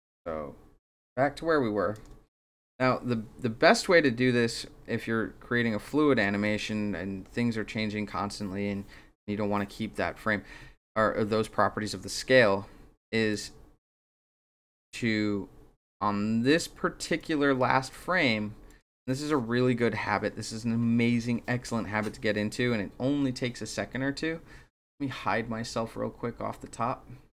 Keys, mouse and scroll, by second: 0.8-1.9 shift+drag, 4.0-6.2 drag, 13.3 click, 14.3-16.5 drag, 17.2 click, 17.9 click, 18.7 click, 27.3 click.